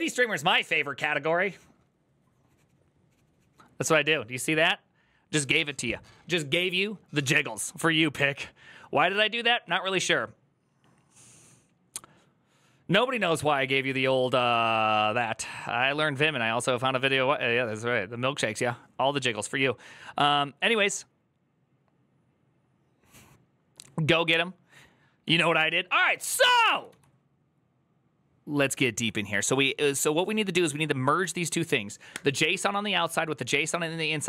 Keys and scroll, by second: 27.5 typing, 28.9-30.0 typing.